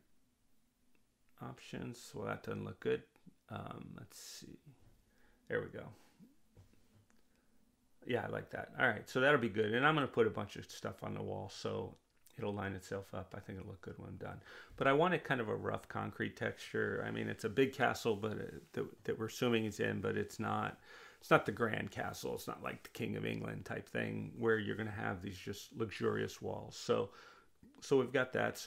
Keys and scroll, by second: 1.0 2, 1.4 Return, 4.4 1, 4.8 Return, 7.2 2, 7.6 Return.